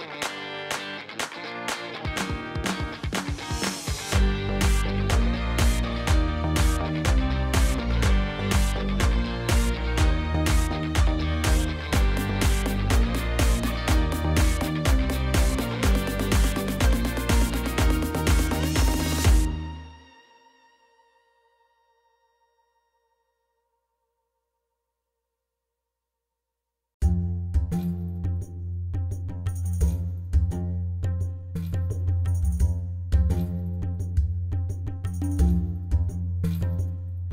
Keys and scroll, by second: 4.6 ctrl+b, 8.6 3, 10.0 alt+a, 13.1 e, 15.6 ctrl+b, 20.7 b, 21.0 i, 21.2 g, 21.3 e, 21.5 Return, 26.2 d, 26.5 5, 27.1 Return, 29.6 b, 30.0 w, 30.1 n, 30.4 Return, 32.4 7, 34.0 4, 34.9 0, 35.1 Return, 36.7 BackSpace, 36.8 d, 37.2 Return.